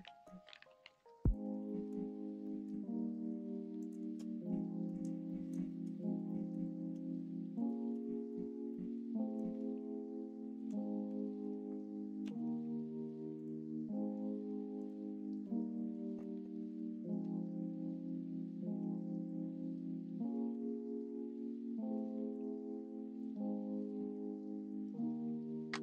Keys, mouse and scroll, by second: 1.2 shift+click, 1.6 middle click, 2.4 middle click, 3.8 shift+click, 4.4 middle click, 5.2 middle click, 6.2 middle click, 7.5 shift+click, 7.9 middle click, 8.6 middle click, 12.2 ctrl+e, 14.7 click, 15.4 middle click, 18.3-20.5 middle drag, 20.9 middle click, 21.9 middle click, 22.3 click, 22.5 middle click, 23.1 middle click, 23.5 middle click, 23.8 middle click.